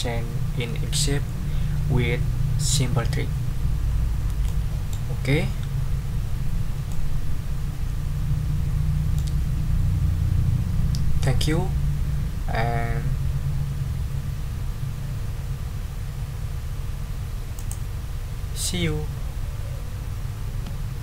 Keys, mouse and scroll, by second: 4.5 click, 4.8 ctrl+middle click, 6.2 ctrl+scroll up 2, 6.9-9.3 ctrl+middle drag, 17.5 click.